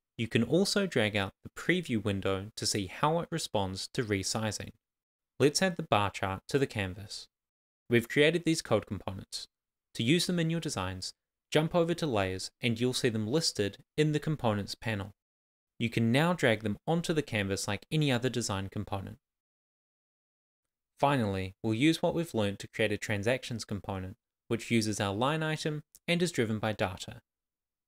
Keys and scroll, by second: 3.3 super+s.